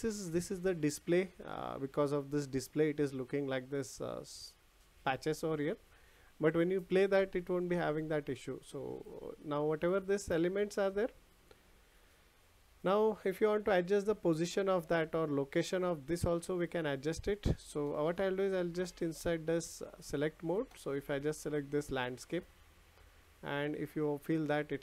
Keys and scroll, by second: 17.0 ctrl+z.